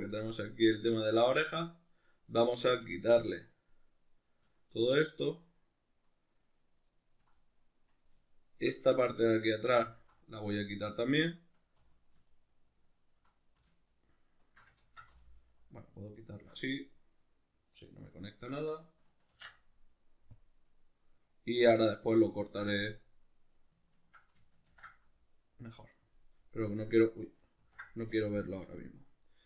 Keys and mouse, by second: 0.2-1.5 middle drag, 1.5 ctrl+right click, 1.9 ctrl+right click, 2.3 ctrl+right click, 2.6 ctrl+right drag, 3.5 ctrl+right click, 4.2 ctrl+right click, 4.9 ctrl+right click, 5.2 ctrl+right click, 6.6 ctrl+right click, 7.0 ctrl+right click, 7.4-9.8 middle drag, 9.8 alt+shift+right click, 10.3 middle click, 12.2 alt+shift+right click, 13.9 alt+shift+right click, 14.8 ctrl+z, 15.4 alt+shift+right click, 16.0 alt+shift+right click, 16.6-23.5 middle drag, 19.3 ctrl+e, 23.5 right click, 23.9 ctrl+right click, 24.7 ctrl+e, 26.7-29.4 middle drag, 27.5 ctrl+e.